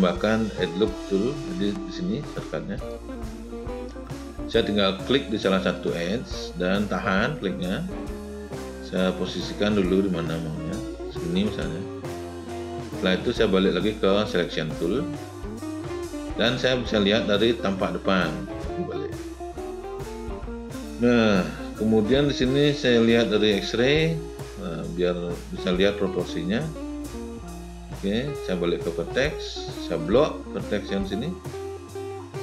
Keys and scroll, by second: 16.8 space.